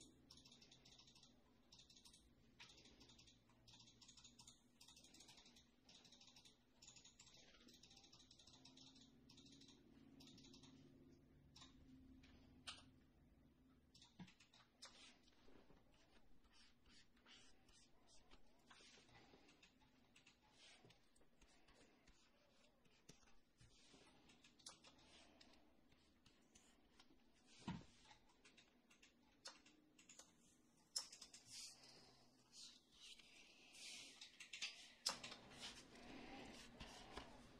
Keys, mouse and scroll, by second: 12.6 f.